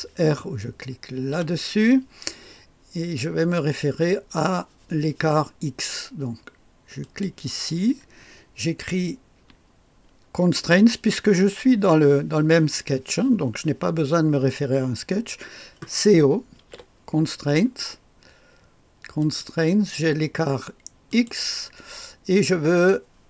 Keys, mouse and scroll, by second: 0.0 typing, 1.3 typing, 7.0 click, 16.3-17.1 typing, 19.1-20.2 drag, 21.0 click.